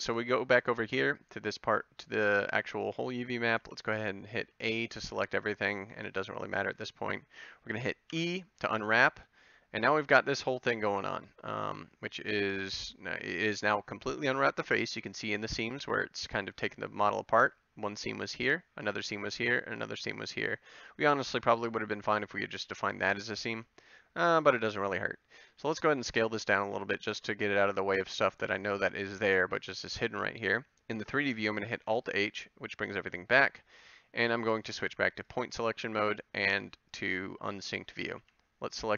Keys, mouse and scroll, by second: 3.6 a, 4.4 a, 8.2 e, 25.6 s, 27.1 g, 29.3 a, 31.7 alt+h, 32.3 alt+h, 38.2 a.